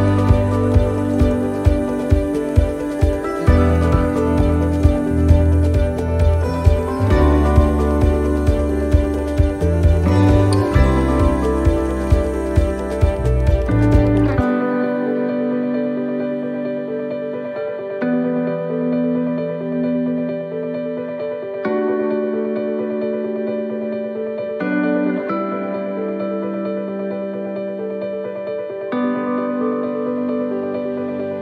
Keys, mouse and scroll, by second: 1.7 right click, 2.4 shift+right click, 2.9 right click, 3.7 middle click, 5.4 click, 6.2 right click, 6.5 shift+right click, 6.9 middle click, 7.5 scroll down 1, 8.6 e, 10.0 middle click, 10.8 right click, 11.3 shift+right click, 11.8 e, 13.2 middle click, 14.3 middle click, 15.1 ctrl+r, 17.0 middle click, 18.1 middle click, 18.4 ctrl+r, 20.5 ctrl+r, 22.2 right click, 23.8 click, 24.7 right click, 25.7 e, 27.1 middle click, 28.1 ctrl+r, 29.5 middle click, 30.0 scroll up 1, 30.4 middle click.